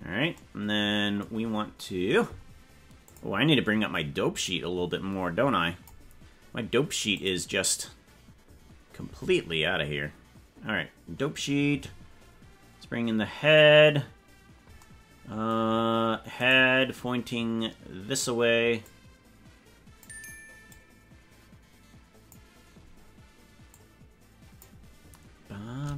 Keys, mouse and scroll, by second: 1.4-1.8 scroll up 4, 3.0 click, 4.4-5.8 drag, 7.2 click, 16.4 right click, 18.8-20.0 drag, 20.6-22.3 drag, 23.6 click.